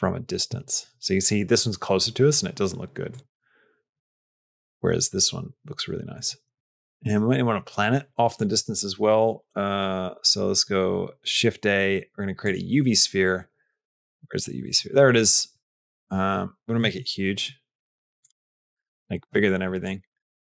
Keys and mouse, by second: 2.9 click, 8.2 click, 10.0 shift+a, 13.5 g, 16.7 s, 19.0 s, 20.3 g.